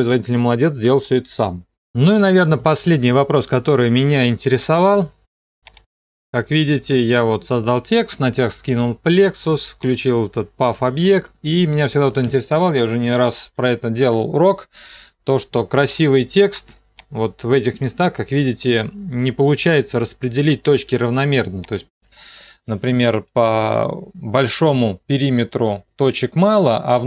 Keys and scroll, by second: 14.2 ctrl+2.